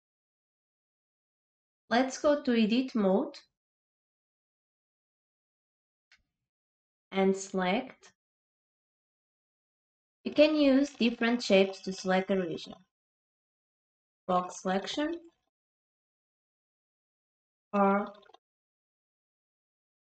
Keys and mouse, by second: 3.8-5.5 drag, 8.4-15.9 drag, 19.1 click.